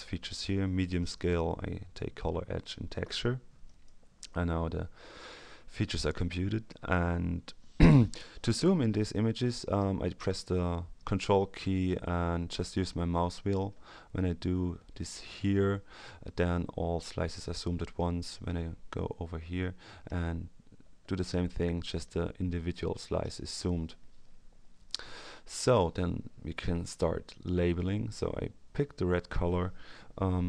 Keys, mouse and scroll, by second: 3.6 click, 12.3-13.1 ctrl+scroll up 2, 13.1-13.6 ctrl+scroll down 2, 13.7-14.1 ctrl+scroll up 2, 14.1-14.6 ctrl+scroll down 2, 14.7-15.2 ctrl+scroll down 2, 16.5-17.0 ctrl+scroll up 2, 17.4-17.9 ctrl+scroll down 2, 20.8-21.6 ctrl+scroll up 2, 21.6-22.2 ctrl+scroll down 2, 22.2-22.5 ctrl+scroll down 1, 27.2 click.